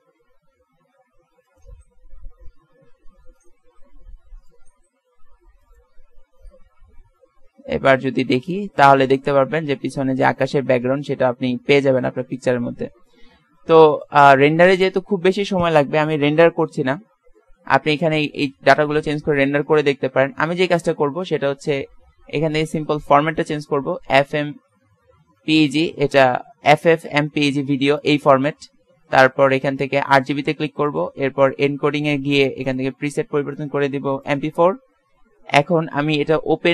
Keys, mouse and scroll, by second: 1.8-3.3 drag, 4.9 s, 5.0 click, 6.1 click, 7.0 shift+z, 12.8 z, 12.9 z, 13.8 ctrl+s, 20.1-24.3 drag, 30.1-34.4 drag.